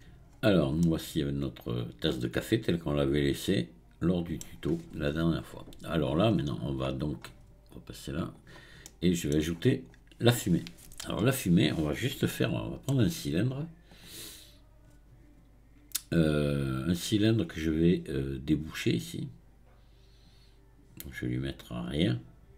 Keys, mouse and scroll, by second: 0.3-0.8 scroll up 1, 0.8-3.9 middle drag, 4.6-6.4 scroll down 2, 6.4-7.6 scroll up 2, 8.3 click, 9.5-10.0 scroll down 6, 11.0 KP_1, 12.3-13.9 shift+middle drag, 13.9-17.0 drag, 21.9-22.5 drag.